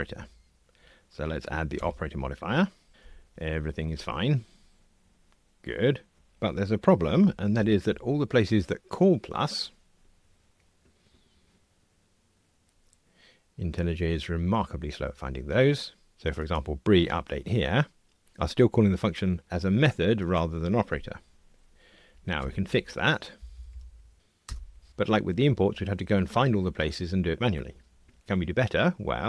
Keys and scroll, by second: 3.0 ctrl+r, 7.6 ctrl+alt+h, 22.4 alt+Return.